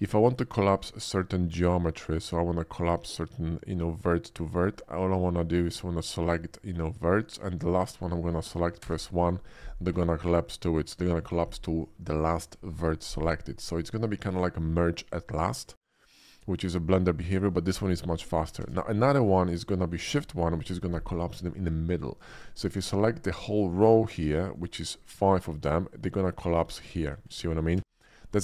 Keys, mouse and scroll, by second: 0.1 shift+middle click, 0.5 shift+middle click, 4.4 shift+middle click, 5.7 shift+click, 6.7 shift+click, 7.4 shift+click, 8.8 1, 18.6 ctrl+z, 20.1 shift+1, 22.6 ctrl+z, 23.6 click, 24.6 ctrl+click, 26.9 shift+1, 27.9 ctrl+z.